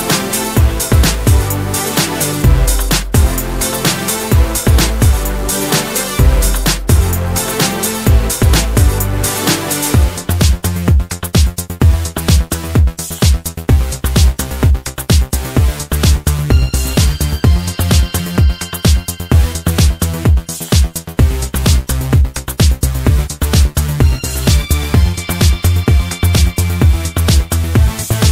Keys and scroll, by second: 15.3 Return, 16.0-17.3 typing, 17.4 Return, 19.9 Return.